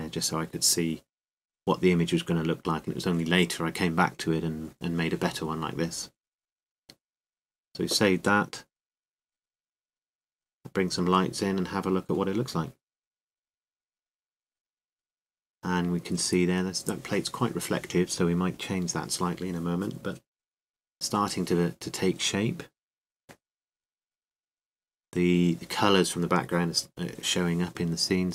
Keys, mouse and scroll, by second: 1.4-3.3 middle drag, 3.6-5.4 drag, 5.4-7.2 middle drag, 8.1-9.8 drag, 9.8-11.5 middle drag, 11.5-14.8 shift+drag, 26.8-28.3 right drag.